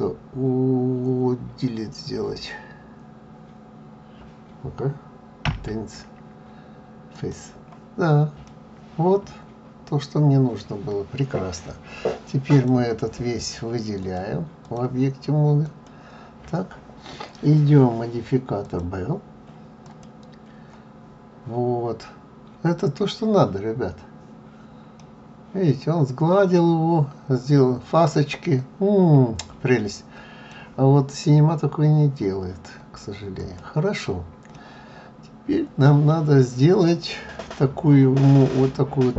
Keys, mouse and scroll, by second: 12.5 click, 14.0 click, 25.0 middle click, 33.4 click, 34.5 middle click.